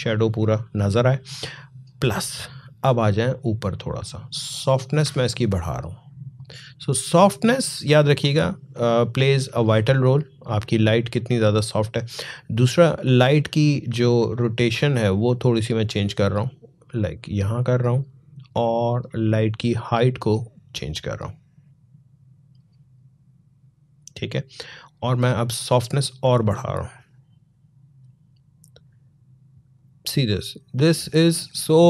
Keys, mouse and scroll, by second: 4.1-8.7 drag, 8.9-12.4 drag, 14.6-24.7 drag, 25.3-31.8 drag.